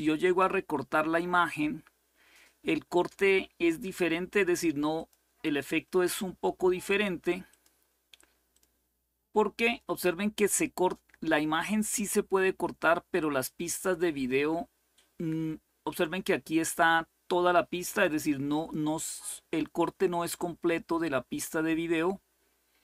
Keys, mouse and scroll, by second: 0.0 click, 4.7 click, 7.2 click, 8.3 click, 11.4 click, 13.4 click, 17.6-19.2 drag.